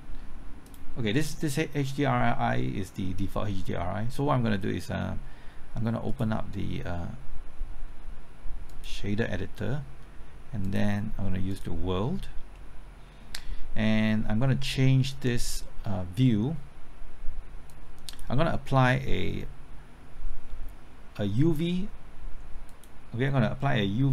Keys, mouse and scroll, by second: 12.5-13.5 middle drag, 17.7 click.